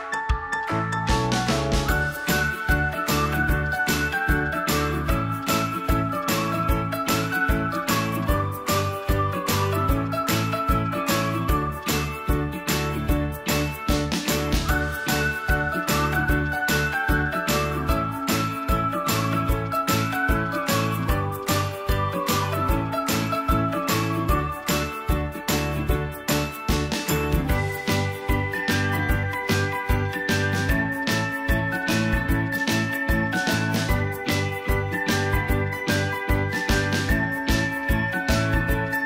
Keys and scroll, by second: 1.0 i, 3.2 ctrl+v, 30.5 Delete, 33.7 Delete, 37.9 Delete.